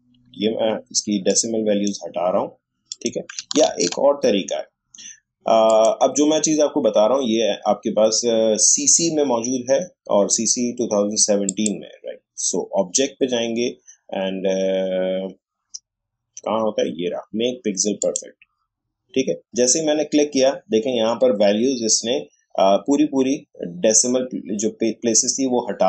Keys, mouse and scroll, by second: 1.3-2.9 drag, 3.7 ctrl+z, 5.7 click, 13.7 click, 18.0 click.